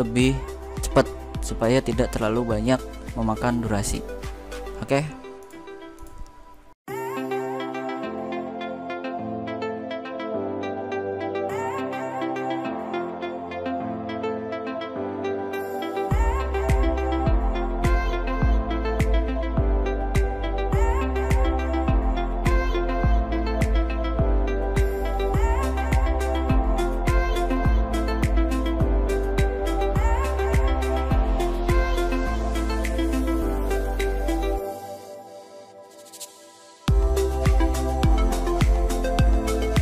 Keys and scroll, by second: 8.8 ctrl+x, 8.9 ctrl+f, 9.6 ctrl+f, 12.7 ctrl+a, 13.5 ctrl+f, 15.7 ctrl+a, 15.8 ctrl+g, 16.2 ctrl+a, 16.4 ctrl+x, 16.9 ctrl+v, 18.2 ctrl+g, 18.5 ctrl+x, 18.6 ctrl+v, 19.4 ctrl+f, 20.0 ctrl+f, 23.5 space, 23.8 ctrl+a, 24.0 ctrl+f, 26.8 BackSpace, 26.9 Return, 27.2 ctrl+g, 27.4 ctrl+v, 27.5 ctrl+a, 27.6 ctrl+g, 27.7 ctrl+x, 28.2 ctrl+v, 28.5 ctrl+g, 29.1 ctrl+z, 29.7 ctrl+g, 30.6 ctrl+x, 31.1 ctrl+u, 31.9 ctrl+f, 35.2 ctrl+a, 35.3 ctrl+f, 38.4 shift+Right, 38.5 2, 38.6 Return, 39.0 ctrl+g.